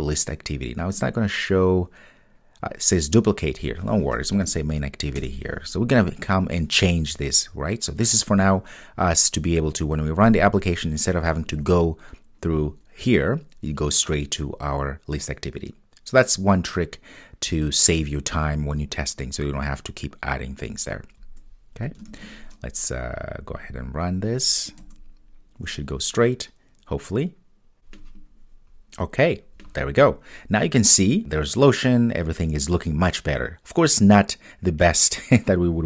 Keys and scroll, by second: 5.2 Return, 22.2 super+s.